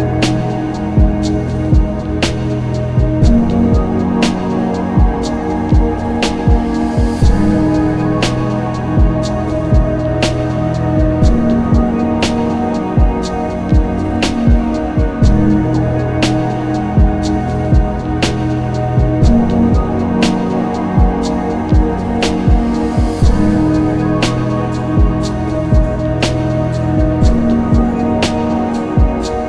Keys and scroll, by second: 1.1 z, 4.4 z, 5.0 z, 9.1 ctrl+z, 10.1 ctrl+z, 11.4 ctrl+z, 13.3 z, 19.3 ctrl+z, 19.9 z, 21.6 ctrl+z, 22.5 z, 23.7 ctrl+z, 26.2 ctrl+z, 27.8 ctrl+z, 28.4 ctrl+z.